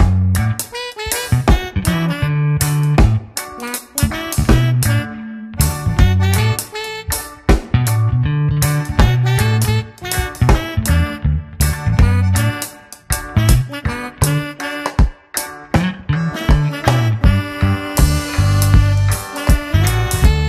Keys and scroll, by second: 0.9 Return, 1.7 shift+F2, 2.2 ctrl+d, 2.4 ctrl+KP_Subtract, 3.9 alt+i, 4.2 a, 4.5 s, 7.6 Return, 8.1 alt+space, 8.9 ctrl+a, 9.2 ctrl+r, 10.3 ctrl+d, 10.6 space, 11.4 c, 14.4 Return, 15.2 ctrl+space, 15.4 ctrl+w, 15.7 Return, 17.6 c, 19.5 Down.